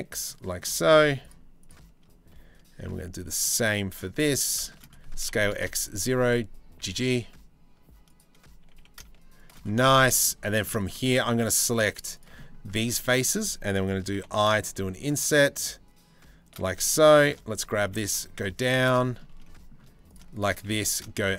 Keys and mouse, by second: 0.1 right click, 0.6 z, 1.2 z, 2.5 c, 3.3 z, 4.7 s, 5.7 g, 8.2 g, 9.5 shift+middle click, 9.7 middle click, 10.0 3, 10.7 shift+middle click, 13.8 i, 16.2 i, 16.7 2, 16.9 click, 17.5 g, 18.6 shift+middle click, 19.0 click, 19.7 drag, 20.4 g.